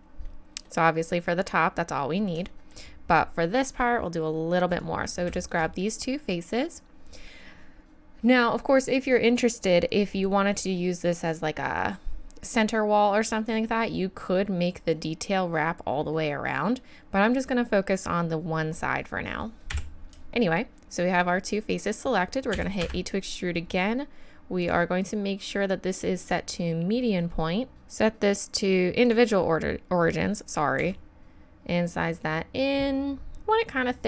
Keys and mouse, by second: 0.3 middle click, 0.6-2.0 middle drag, 2.6-7.1 middle drag, 19.1 middle click, 19.7 KP_1, 22.5 e, 26.4-27.8 middle drag, 27.8 e, 30.8 s.